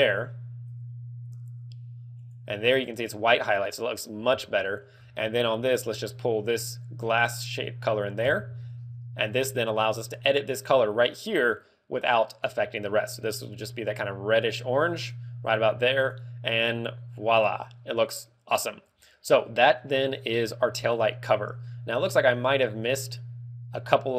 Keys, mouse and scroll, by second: 0.6 click, 2.1 click, 4.3 Tab, 4.8-5.4 scroll down 5, 6.7 click, 8.2 Tab, 8.6-9.7 scroll up 9, 9.9 click, 11.5 click, 21.5 scroll up 2, 22.0-22.4 scroll down 4, 22.7 scroll up 1.